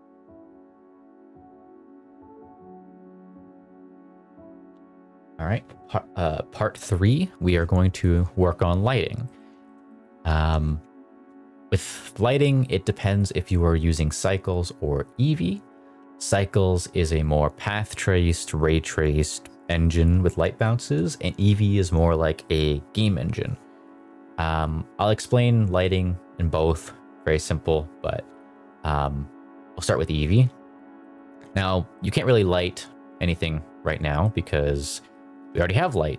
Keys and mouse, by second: 9.2 middle click, 9.6 shift+middle click, 9.8 middle drag, 14.0-15.1 drag, 28.2-29.9 drag, 30.9 middle drag, 31.4 shift+middle click, 31.8-33.8 middle drag, 34.1 middle drag, 34.8 middle click.